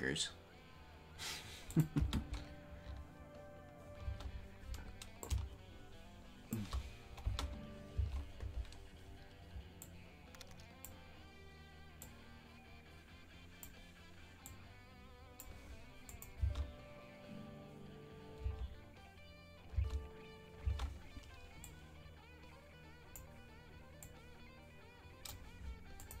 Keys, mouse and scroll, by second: 1.8-3.6 drag, 3.6 space, 4.3 space, 5.2-6.6 drag, 7.2 space, 8.0 space, 9.8-10.9 drag, 12.0-13.7 drag, 14.4-15.5 drag, 16.1 click, 16.3 space, 18.5 space, 20.7 space, 21.6-23.2 drag, 24.0-25.4 drag, 26.1-26.2 drag.